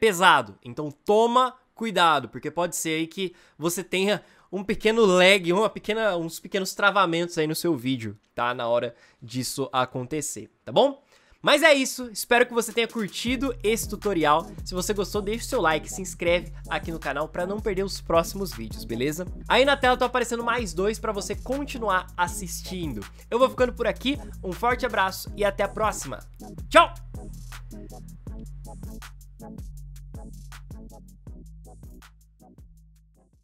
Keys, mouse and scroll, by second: 5.1 ctrl+s.